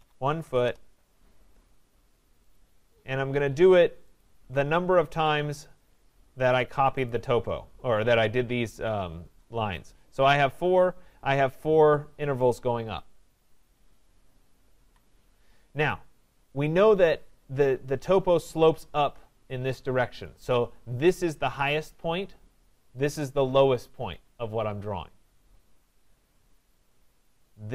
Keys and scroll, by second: 14.7 Escape.